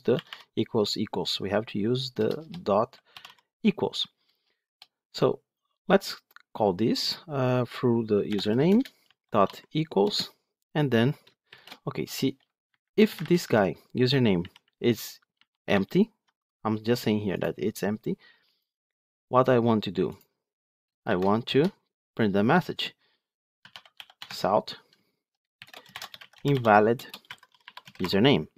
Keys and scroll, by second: 8.6 Return, 24.2 Tab, 28.2 Tab.